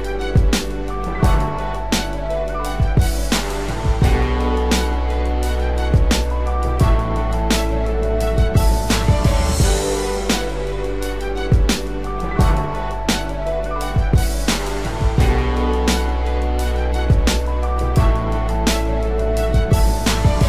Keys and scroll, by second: 8.2 ctrl+-, 8.9 ctrl+0.